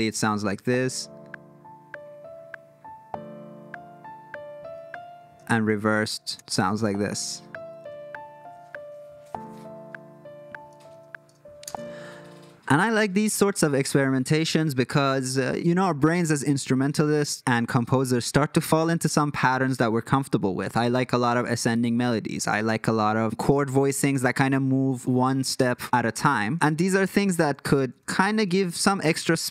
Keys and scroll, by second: 0.4 space, 6.2 shift+super+r, 6.6 space, 11.6 space, 26.9 super+z, 27.2 super+z, 27.5 super+z, 27.8 super+z, 28.1 super+z, 28.5 super+z, 29.0 super+z, 29.4 super+z.